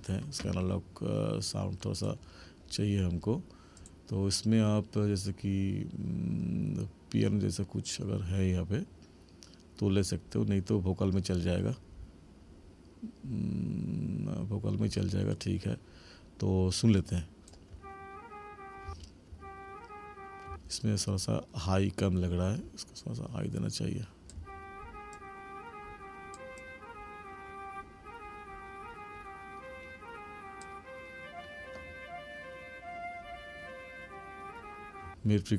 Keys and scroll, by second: 17.7 space, 24.3 space, 35.1 space.